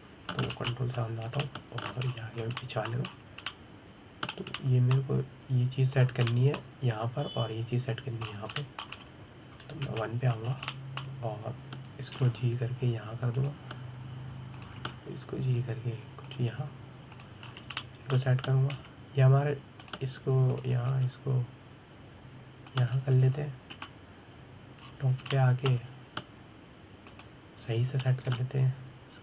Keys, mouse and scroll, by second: 0.1-0.4 scroll up 2, 0.4-2.2 middle drag, 2.2 ctrl+KP_7, 3.1 shift+middle click, 3.7-4.3 scroll up 6, 4.3 shift+middle click, 4.8-5.2 scroll down 4, 5.2-7.6 middle drag, 7.6 click, 7.9-10.0 middle drag, 10.0 scroll down 3, 10.2-10.6 shift+middle drag, 10.6-11.5 scroll up 2, 11.5 KP_1, 12.1 scroll up 3, 12.4-13.8 shift+middle drag, 13.8 g, 16.2 click, 18.8 click, 19.1 scroll down 2, 19.5 shift+middle click, 20.4 g, 22.2 click, 22.6 g, 25.4 KP_7, 26.5-27.0 scroll up 4, 27.0-28.7 shift+middle drag, 28.7 click.